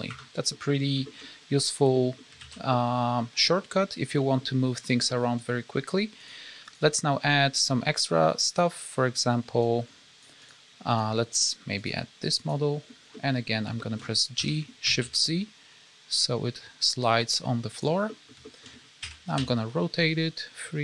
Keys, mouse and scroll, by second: 0.5 middle click, 1.0 shift+middle click, 1.2-1.5 scroll up 1, 1.9 middle click, 2.4 alt+a, 2.6 middle click, 3.5 scroll up 1, 4.1 middle click, 4.8 scroll down 2, 5.0 scroll up 1, 5.1 middle click, 6.2 click, 6.6 click, 8.4 click, 10.9 click, 12.3 click, 13.1 middle click, 13.7 shift+middle click, 14.3 g, 18.0 middle click, 18.4 shift+middle click, 18.6 scroll up 1, 18.9 r.